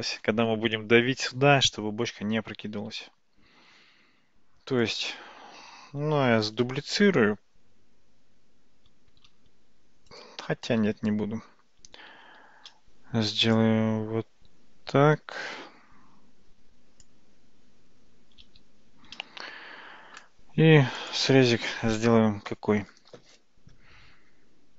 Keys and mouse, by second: 4.8 click, 7.0 shift+d, 10.8 ctrl+z, 12.6 shift+a, 21.0-24.7 drag.